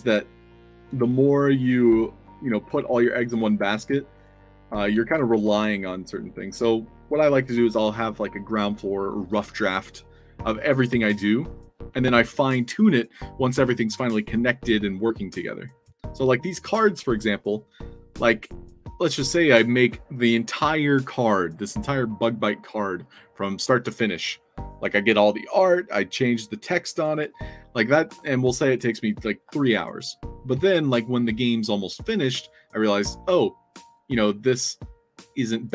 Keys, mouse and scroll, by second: 0.0 click.